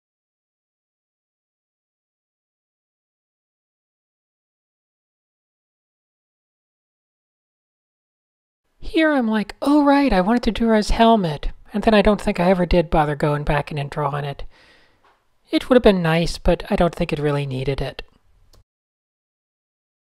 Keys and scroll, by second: 1.2-4.5 typing, 8.2-10.0 typing, 9.0 Down, 9.1 Down, 14.6-15.6 typing, 17.2-18.5 typing, 19.8-20.0 typing.